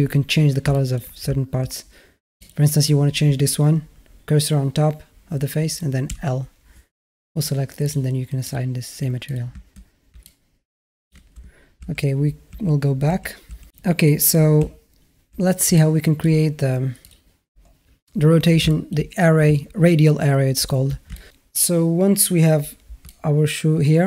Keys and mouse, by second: 0.5-0.8 alt+middle drag, 1.1 Tab, 2.2 click, 6.2 l, 7.7 click, 8.3-8.6 drag, 9.1 click, 9.5 Tab, 10.1 alt+middle click, 12.0 ctrl+z, 12.6 ctrl+z, 13.2-13.6 ctrl+z, 13.6 Tab, 14.4 z, 15.6-16.1 alt+middle drag, 16.9 click, 18.5 shift+a, 18.5 shift+middle drag, 18.7 shift+a, 21.0 middle drag, 21.0 shift+a, 22.9-23.9 alt+middle drag.